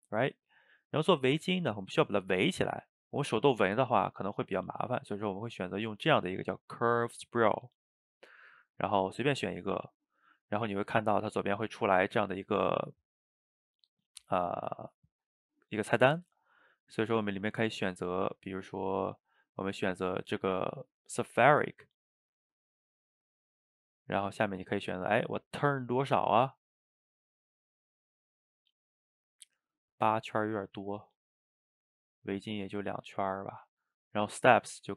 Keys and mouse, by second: 16.6-19.6 drag, 21.0-24.2 shift+middle drag, 24.2-27.4 drag, 30.4-34.9 drag.